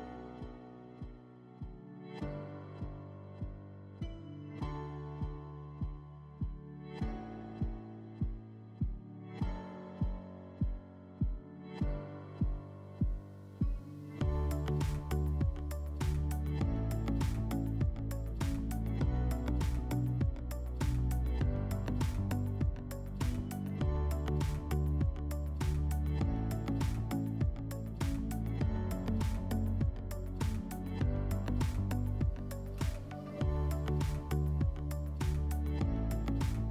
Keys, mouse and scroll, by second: 7.6-8.3 middle drag, 8.3 click, 10.9 click, 12.6 typing, 12.8 Tab, 13.7 click, 14.7 click, 16.4 click, 17.9 click, 19.3-19.9 scroll, 20.7 click, 23.3 click, 30.5 click, 32.3 click, 35.0 click, 35.2 click, 35.4-36.7 typing.